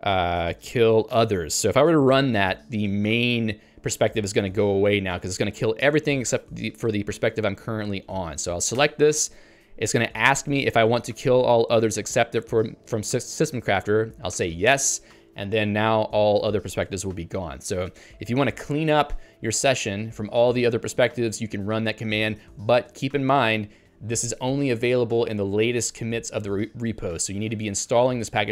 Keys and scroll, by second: 8.8 Return, 14.4 s, 14.8 Return.